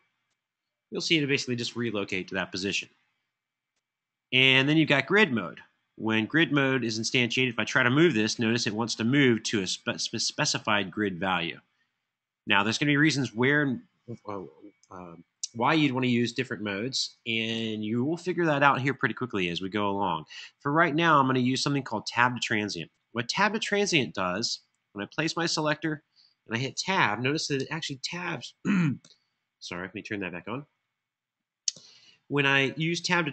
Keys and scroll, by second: 0.8 4, 15.1 super+z, 15.3 super+z, 15.7 super+z, 27.2 Tab, 28.7 Return, 31.4 Return.